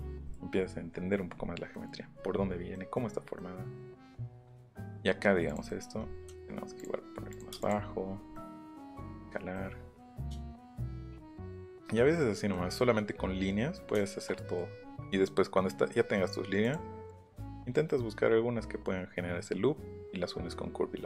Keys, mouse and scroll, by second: 0.3 middle click, 4.2 middle click, 4.6-5.0 scroll down 2, 5.5 click, 5.6 middle click, 6.2 s, 6.8 click, 7.3 click, 7.5 space, 7.6 click, 7.8 middle click, 8.1 middle click, 8.9 middle click, 9.5-11.5 middle drag, 14.3 middle click, 14.8 middle click, 15.1 middle click, 15.9 middle click, 16.6 click, 17.1 click.